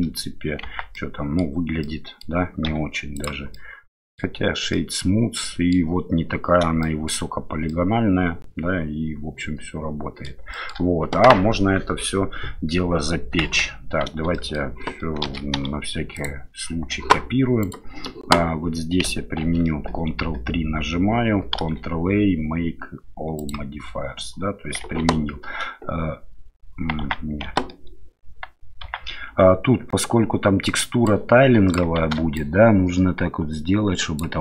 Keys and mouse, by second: 0.6 Tab, 0.9-1.4 middle drag, 1.8-2.2 middle drag, 2.6 q, 3.5-4.2 middle drag, 4.7-5.7 middle drag, 6.8-7.1 shift+middle drag, 7.7-10.2 middle drag, 10.5 shift+middle drag, 13.4 KP_7, 14.3 shift+middle drag, 15.2 shift+d, 17.6 click, 19.5 ctrl+3, 21.6 ctrl+a, 25.0 Tab, 27.0 Tab, 28.9 Tab, 32.0 shift+z.